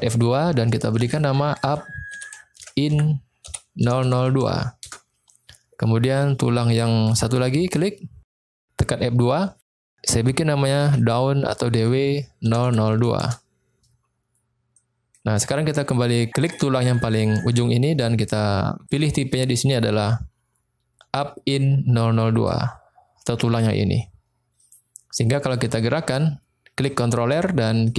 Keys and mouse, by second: 4.0 0, 6.2-7.0 middle drag, 7.6 click, 8.3 F2, 12.7 0, 14.9 middle click, 16.4 click, 17.0-17.5 middle drag, 18.9-22.6 drag, 24.6-25.4 middle drag, 25.6-26.0 shift+middle drag, 26.7 click, 27.7 middle click.